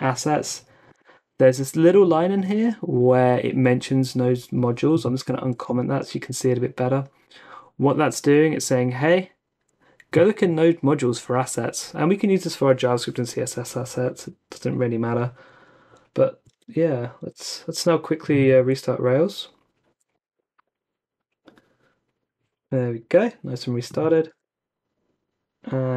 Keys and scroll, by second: 5.2-5.6 typing, 5.6 super+s, 16.5 super+Tab, 17.2 super+Tab, 18.5 ctrl+c, 19.9 Up, 20.1 Return, 24.3 super+r.